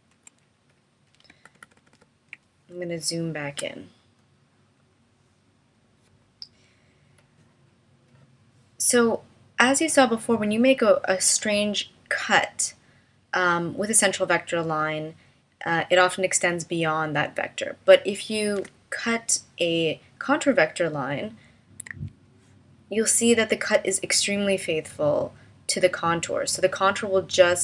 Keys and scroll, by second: 1.4 super+=, 2.8 space, 18.6 BackSpace, 21.9 a.